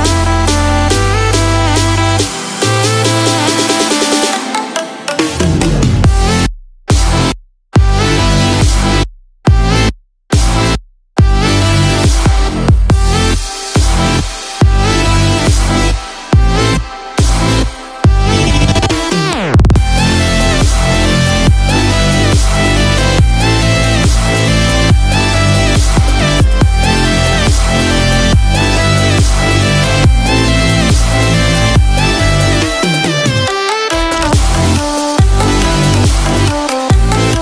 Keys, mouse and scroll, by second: 6.2-11.5 click, 14.5 click, 19.2 middle click, 19.2 click, 19.2-19.7 scroll up 7, 21.0 click, 32.7 click.